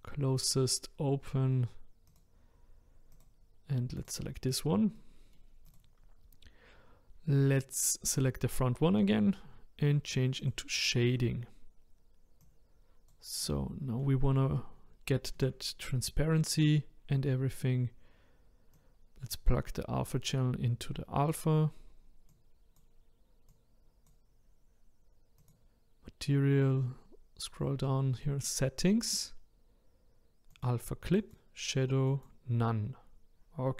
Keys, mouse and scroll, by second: 3.5 drag, 5.0 middle click, 5.7 click, 10.5 click, 12.5 click, 13.4 middle click, 14.0-14.6 scroll up 1, 14.6-22.3 shift+middle drag, 22.3-33.7 drag.